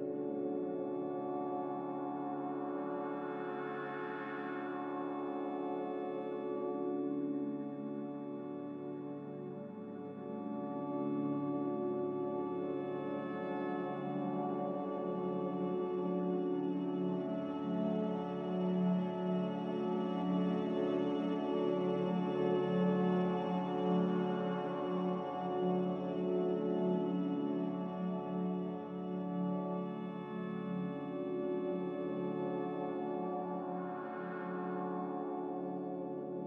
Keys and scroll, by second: 15.3 s, 17.1 Escape, 17.4 z, 19.9 Escape, 20.0 Escape, 20.1 Escape, 20.8 g, 26.6-29.2 typing, 29.6 Return, 34.7 s, 35.5 7, 35.7 Tab, 36.1 5.